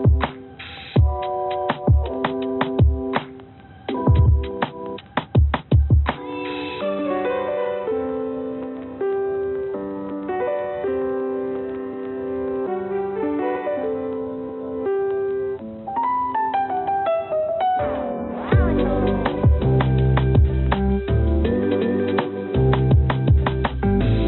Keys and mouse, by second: 4.8 click, 4.9 click, 6.2-7.3 drag, 7.6 click, 10.1 ctrl+z, 14.9 ctrl+a, 17.2-18.7 drag, 19.9 g.